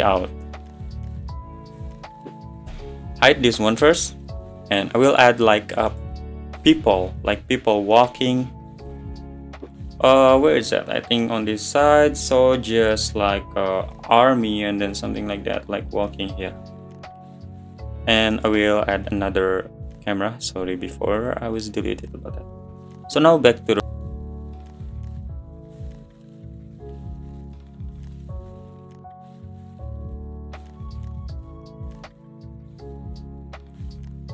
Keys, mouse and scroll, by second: 0.5 middle drag, 0.7-1.1 scroll up 5, 1.6-2.0 scroll up 1, 2.7 h, 3.3 middle click, 3.5-4.1 scroll up 5, 6.8-7.9 right drag, 7.9-8.3 middle drag, 8.3 scroll down 2, 8.4-10.3 middle drag, 10.3 click, 14.9-19.2 middle drag, 19.2-21.0 right drag, 21.2 click, 23.8 click, 24.5 `, 25.4 scroll down 2, 25.5 scroll up 1, 25.7 g, 26.1 middle click, 26.2 `, 26.3 middle drag, 26.4-26.9 scroll down 2, 26.5-26.8 middle drag, 26.9 middle click, 27.1 click, 27.4 middle click, 27.5 scroll up 5, 27.6 scroll down 8, 27.9 middle drag, 28.0 scroll up 2, 28.2-28.6 middle drag, 28.6 scroll down 6, 28.6-30.6 typing, 28.9 scroll up 1, 29.5 middle click, 31.2-31.7 middle drag, 31.7 click, 32.4 middle click, 32.4 scroll up 1, 32.6 middle click, 33.0 `, 33.2 middle click, 33.5 shift+d, 33.8 click, 34.1 click.